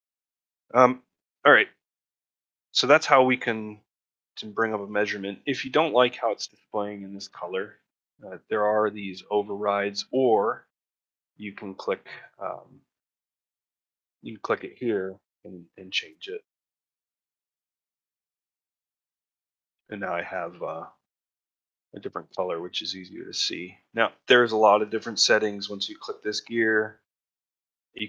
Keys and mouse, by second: 2.1 middle click, 2.5 shift+middle click, 19.8 middle click, 21.0 middle click, 24.7 click, 27.7 click.